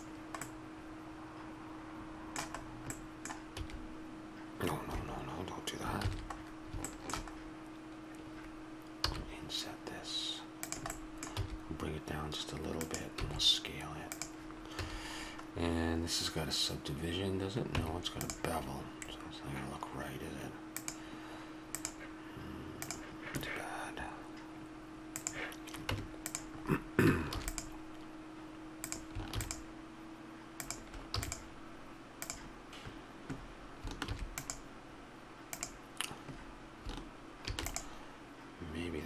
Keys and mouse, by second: 0.6-2.1 middle drag, 3.5 e, 6.0 ctrl+z, 9.0 i, 11.0 click, 11.3 e, 13.2 s, 14.8 a, 17.8 Tab, 18.5-23.7 drag, 25.1-26.6 drag, 25.9 Tab, 26.6 middle click, 27.4 ctrl+r, 29.4 ctrl+r, 33.3 ctrl+r, 33.3-39.0 drag.